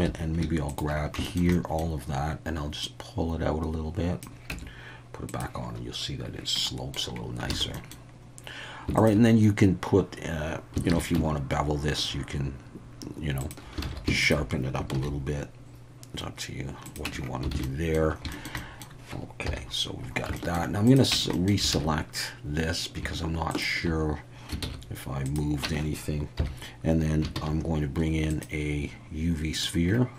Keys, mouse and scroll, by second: 0.0 2, 0.7 alt+shift+click, 1.2 shift+middle click, 1.5 middle click, 2.9-4.2 drag, 4.5 Tab, 5.4 click, 6.6 middle click, 7.5 alt+a, 7.7 middle click, 9.0 alt+shift+click, 10.9 ctrl+b, 13.4 shift+click, 13.8 alt+a, 14.2 alt+shift+click, 14.9 ctrl+b, 16.8 click, 17.0 Tab, 17.5 alt+a, 17.6-17.9 middle drag, 18.3 shift+middle drag, 18.6 middle click, 19.5 KP_1, 20.4 shift+middle click, 20.8 click, 21.1 Tab, 21.3 middle click, 21.7 alt+a, 24.6 shift+s, 25.6 Tab, 26.4 KP_1, 27.3 shift+a.